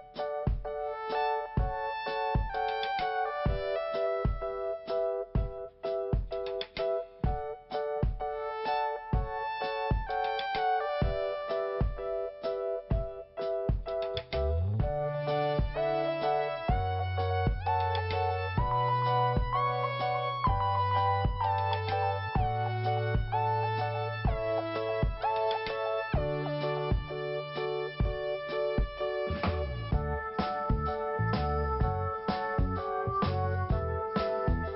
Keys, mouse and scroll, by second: 1.1 click, 1.2 click, 2.4 click, 2.5 click, 3.9 click, 4.8 click, 4.9 click, 5.0 click, 5.1 click, 6.8 click, 8.1 middle click, 14.8 click, 19.9 click, 27.8 scroll down 1, 28.4 scroll down 1, 28.9 scroll up 1, 30.0 click, 31.3 scroll up 1, 32.9 click.